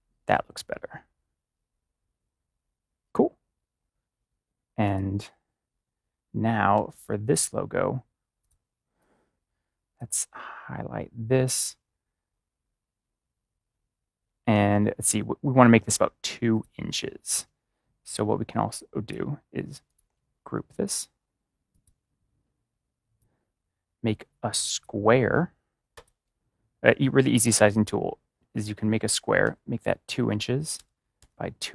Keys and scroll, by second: 6.7 ctrl+-, 29.3 2, 30.6-31.1 typing.